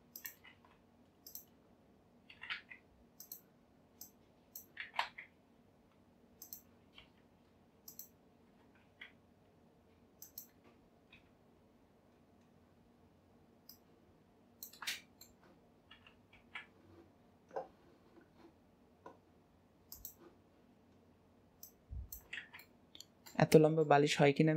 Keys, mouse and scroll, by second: 1.7-2.4 scroll up 3, 2.4 s, 4.1 click, 11.2 KP_7, 12.2 scroll down 2, 12.7-13.8 scroll up 2, 13.8 click, 15.0-16.0 shift+middle drag, 16.0 s, 21.7 click, 22.5 alt+z, 22.7-24.2 middle drag, 24.2-24.5 scroll up 2.